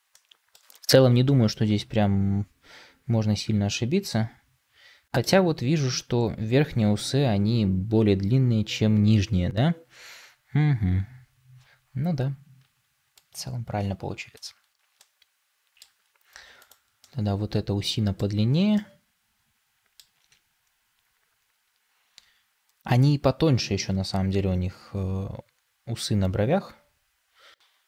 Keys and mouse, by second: 14.9-15.8 middle drag, 16.9-18.1 middle drag, 18.6-19.9 middle drag, 26.4 s.